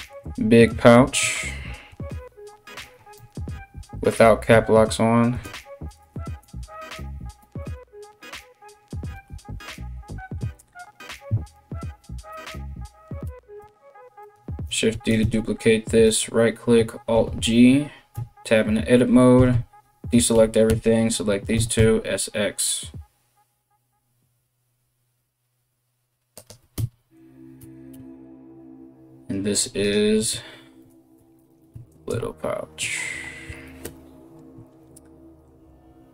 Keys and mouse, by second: 7.1 BackSpace, 11.9 KP_1, 12.9 g, 13.9-29.1 middle drag, 14.5 shift+d, 16.7 alt+g, 17.7 Tab, 18.9-21.2 typing, 27.5 Tab, 29.1 click, 29.2 middle click, 29.5-36.1 drag, 31.1 t.